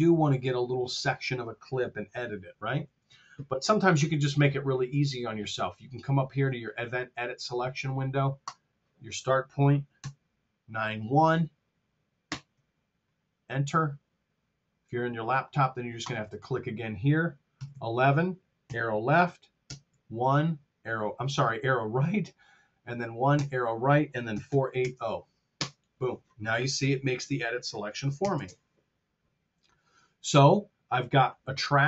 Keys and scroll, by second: 2.1 r, 9.9 KP_9, 17.5 KP_1, 18.6 Right, 19.6 KP_1, 23.3 Right, 24.2 KP_4, 24.4 KP_8, 24.7 KP_0, 25.5 Return, 28.1 ctrl+alt+super+Down.